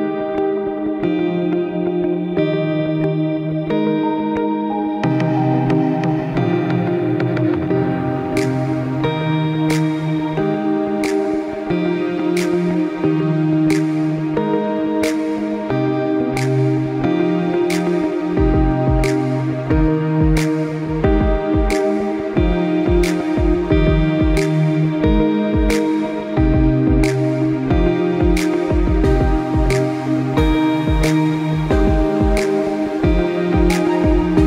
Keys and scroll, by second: 3.2 ctrl+z.